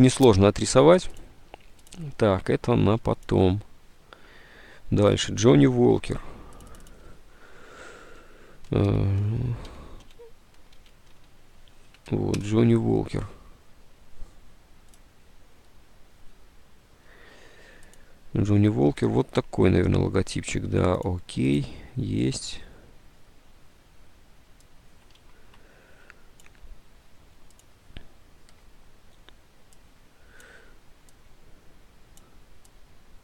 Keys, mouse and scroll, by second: 5.8 alt+Tab, 8.8-11.8 typing, 12.2 Down, 12.5 Return, 25.3 alt+Tab.